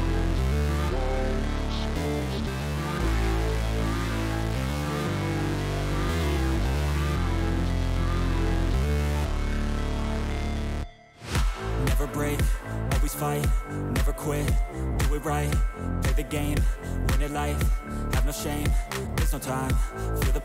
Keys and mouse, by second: 0.7 click, 1.8 alt+shift+click, 2.3 alt+shift+click, 4.6 alt+shift+click, 7.0 alt+shift+click, 7.5 alt+shift+click, 8.2 alt+shift+click, 8.9 alt+shift+click, 9.4 alt+shift+click, 9.9 alt+shift+click, 10.5 alt+shift+click, 11.2 click, 11.9 alt+shift+click, 12.4 alt+shift+click, 16.2 click, 17.2 alt+shift+click, 17.7 click, 18.5 alt+shift+click.